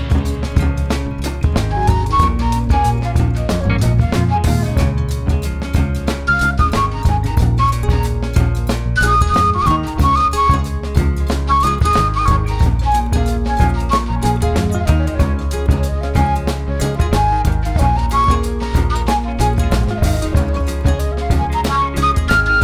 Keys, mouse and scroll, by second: 1.3-3.3 drag, 3.3 middle click, 4.1 click, 4.3-5.9 middle drag, 5.9 click, 6.5 click, 7.3-8.8 middle drag, 8.8-11.1 drag, 11.1-12.4 middle drag, 12.4 click, 12.8 middle click, 13.2 click, 13.8 ctrl+z, 14.0 ctrl+z, 14.5-15.7 drag, 15.7 middle click, 16.2 click, 16.5 middle click, 17.1 click, 17.3 middle click, 17.6 click, 17.7-19.0 middle drag, 19.0 click, 19.3 middle click, 20.0 click, 20.3 middle click, 20.8 click, 21.0 middle click, 21.8-22.6 drag.